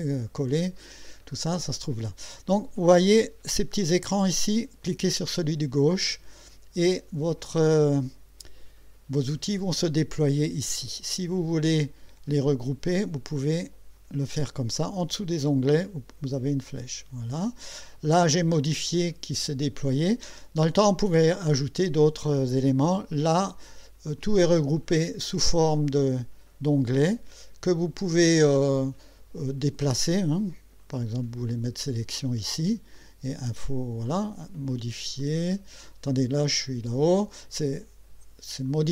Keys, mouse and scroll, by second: 5.1 click, 12.9 click, 15.7-17.4 drag, 25.7-29.2 drag, 30.8-31.7 drag, 32.9 click, 35.2 click, 38.7 click.